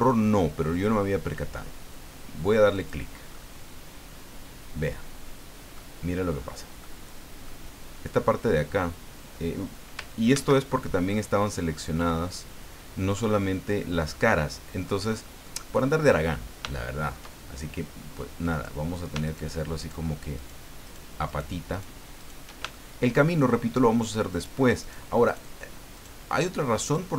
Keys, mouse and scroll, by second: 2.7 click, 3.3-5.9 middle drag, 6.2-6.6 scroll up 1, 6.8 middle click, 10.3 ctrl+z, 11.1-12.2 middle drag, 14.1 middle click, 15.1 scroll down 1, 15.4 middle click, 16.7 shift+middle click, 17.5 shift+scroll up 1, 18.5 right click, 19.2 shift+right click, 19.8 shift+right click, 20.3 shift+right click, 20.8 shift+right click, 21.3 shift+right click, 21.7 shift+right click, 22.2 shift+right click, 22.7 shift+middle click, 24.3 shift+right click, 24.8 shift+right click, 25.2 shift+right click, 26.0 shift+right click, 26.8 shift+right click.